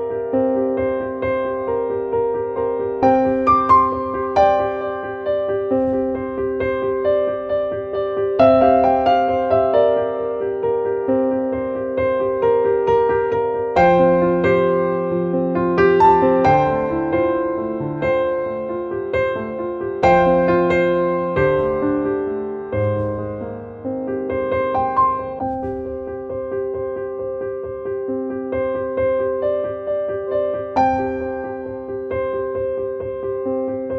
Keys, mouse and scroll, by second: 4.6 click, 5.7 click, 7.8 click, 14.3 click, 16.0 click, 17.0-18.8 drag, 19.8-22.6 drag, 22.6-24.2 drag, 26.8 click, 27.8 click, 30.1 click, 32.9-33.9 drag.